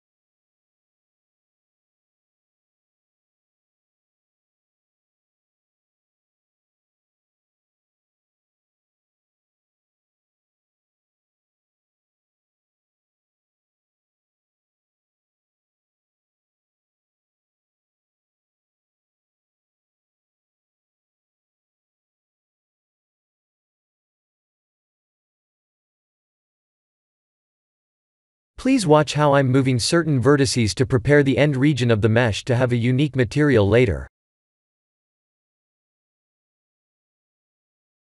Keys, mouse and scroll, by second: 0.6 Tab, 1.7 KP_1, 2.3 shift+z, 4.9 1, 5.9 click, 6.3 b, 9.0 g, 12.3 click, 12.6 b, 13.8 g, 16.1 click, 16.5 b, 18.0 g, 19.9 click, 20.1 b, 21.6 g, 23.0 click, 25.7 b, 26.6 g, 28.4 click, 28.6 b, 29.9 g, 33.1 click, 34.6 click, 36.2 b, 37.0 g.